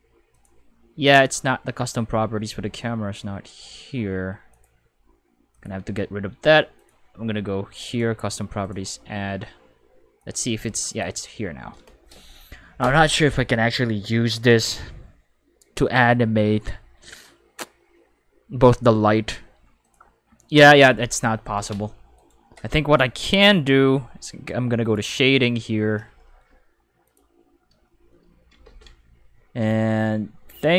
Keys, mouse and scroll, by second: 0.3 click, 4.5 click, 5.5 click, 6.8 click, 7.8 click, 8.6 click, 10.2 click, 10.9 click, 19.8 click, 22.1 right click, 24.8 click, 27.1 click, 27.5-29.1 middle drag, 28.6 ctrl+5.